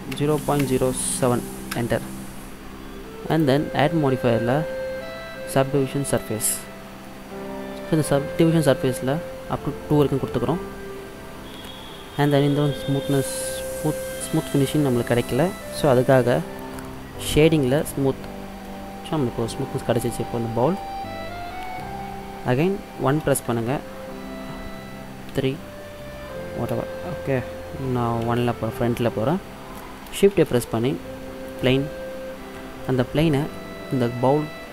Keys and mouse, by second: 1.2 click, 3.5-5.2 drag, 7.1 middle click, 10.0-11.9 drag, 11.7-14.5 middle drag, 17.9-19.7 drag, 19.7-20.3 middle drag, 21.2-23.3 middle drag, 23.3 KP_1, 25.4 KP_3, 28.3 KP_1, 30.4 shift+a, 32.9-34.7 drag.